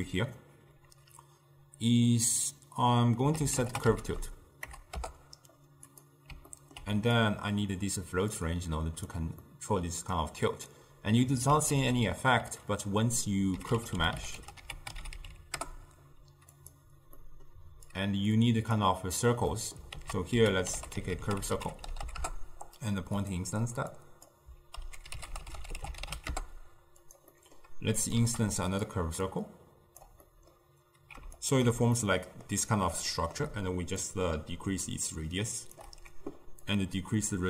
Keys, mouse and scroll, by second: 6.6-7.3 ctrl+middle drag, 7.3 click, 8.4-9.5 drag, 9.5-10.3 middle drag, 10.3 click, 11.8 ctrl+a, 17.3-18.0 middle drag, 18.0 click, 19.6 middle click, 20.0 ctrl+a, 24.0-27.2 drag, 27.4-28.1 middle drag, 28.1 click, 28.3 shift+d, 29.3-30.3 drag, 30.3-31.5 middle drag, 31.5 alt+shift+click, 32.1-34.1 middle drag, 34.1-36.8 shift+drag.